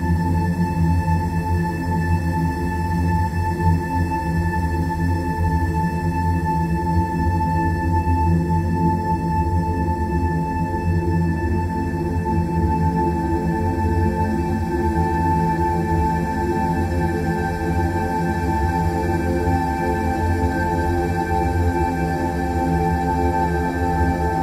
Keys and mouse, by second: 1.7 click, 2.3-2.9 middle drag, 3.2 Tab, 4.1-7.6 middle drag, 7.8 Tab, 9.3 click, 10.3 click, 11.6 click, 15.4-17.1 middle drag, 19.0 click, 21.0 click.